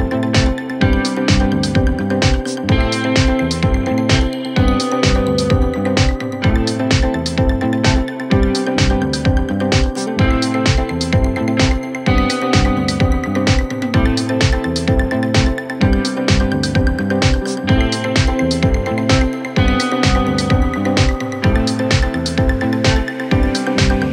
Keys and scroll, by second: 4.7 Delete, 9.3 c, 9.8 shift+F2, 10.2 Escape, 22.3 shift+F2, 22.8 Escape, 23.4 F9.